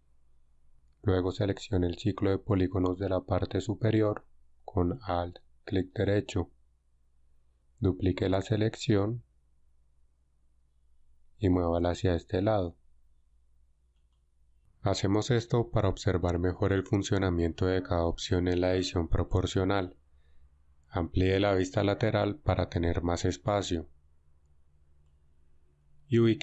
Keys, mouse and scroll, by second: 6.0-7.9 alt+right drag, 9.4 shift+d.